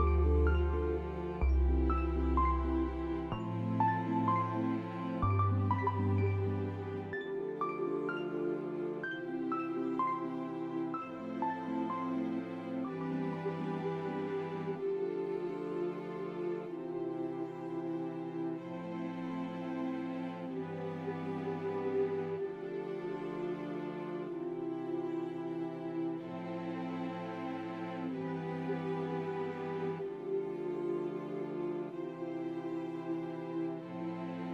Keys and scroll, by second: 2.0 F4, 9.1 s, 12.7 F4, 15.4 Delete, 15.4 Return, 16.5 F4, 18.6-20.8 typing, 19.6 ctrl+c, 23.7 F4, 30.3-31.1 typing, 32.6 t, 33.2 F3, 33.7 Delete.